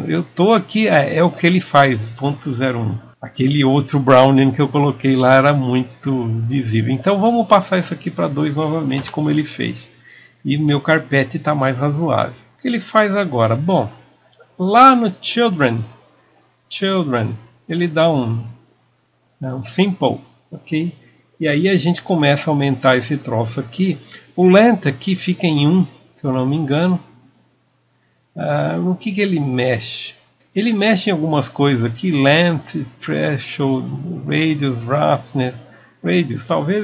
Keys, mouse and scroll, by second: 30.4 KP_Enter, 31.6-34.1 drag.